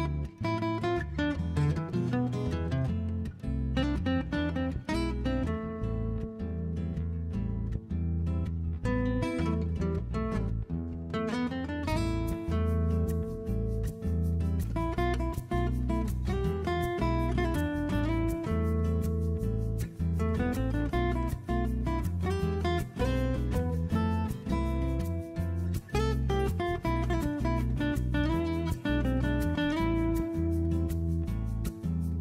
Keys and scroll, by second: 3.1 |, 6.1 super+j, 6.6 super+t, 7.9 super+z, 13.3 super+d, 13.5 super+v, 14.7 super+t, 17.5 b, 20.9-23.1 typing, 24.0 super+z, 26.5-27.1 typing.